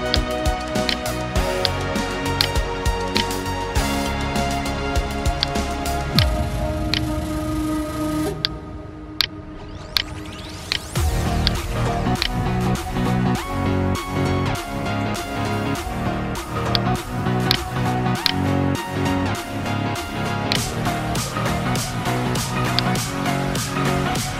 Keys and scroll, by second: 2.2 alt+BackSpace, 3.5 ctrl+d, 7.7 space, 11.3 space, 12.3 ctrl+alt+z.